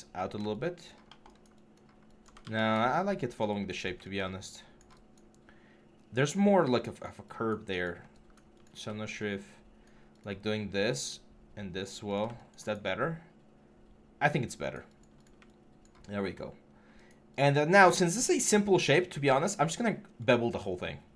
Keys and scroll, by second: 0.0 6, 2.2 ctrl+z.